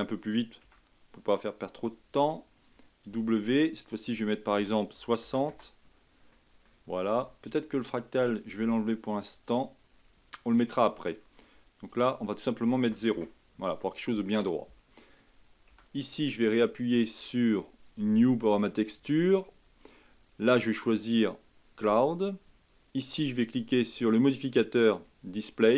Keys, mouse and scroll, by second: 2.2-4.0 right drag, 4.0-6.3 drag, 6.3-9.4 middle drag, 11.7-14.8 drag, 15.7 Tab, 17.8-23.5 drag, 24.4-25.7 drag.